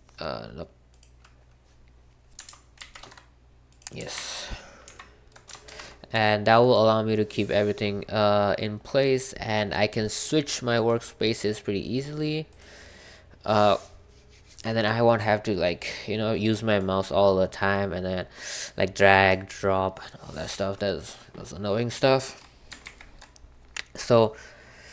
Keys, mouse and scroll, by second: 1.0 click, 2.8 super+c, 4.1 super+2, 4.8 super+3, 5.7 super+c, 10.7 click, 16.4-21.2 drag, 22.8 super+1.